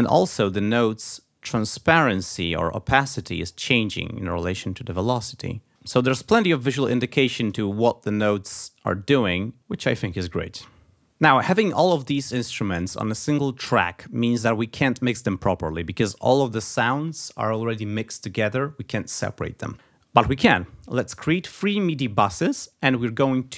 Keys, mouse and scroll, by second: 0.4-1.2 alt+scroll down 4, 1.6-2.2 alt+scroll up 2, 2.3-3.1 alt+scroll down 4, 3.3-3.8 alt+scroll up 2, 3.8-4.7 alt+scroll down 2, 4.7 alt+scroll up 2, 5.7 ctrl+z, 7.5-7.8 ctrl+alt+scroll up 3, 8.6 alt+scroll up 2, 9.2 alt+scroll down 2.